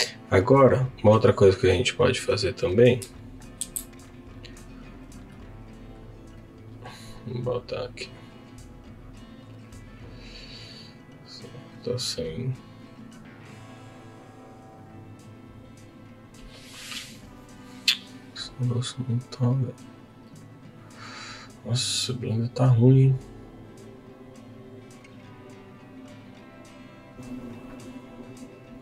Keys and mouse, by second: 2.4 click, 3.6 ctrl+b.